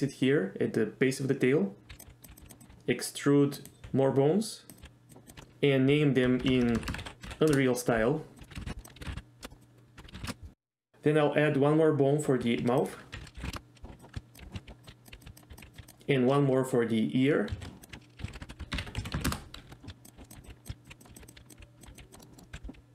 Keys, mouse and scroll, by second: 1.9-2.7 typing, 2.6 click, 3.7 click, 3.8 e, 4.8 click, 4.8 e, 5.1 click, 5.3 click, 5.4 F2, 6.7 BackSpace, 6.9 BackSpace, 7.3 BackSpace, 8.4 F2, 8.6 BackSpace, 8.8 click, 9.3 BackSpace, 10.0 F2, 10.1 BackSpace, 12.4 shift+a, 13.2 F2, 14.0-15.8 typing, 14.6 ctrl+z, 17.6 shift+a, 17.9 F2, 19.7-22.7 typing, 22.2 middle click, 22.3 middle click.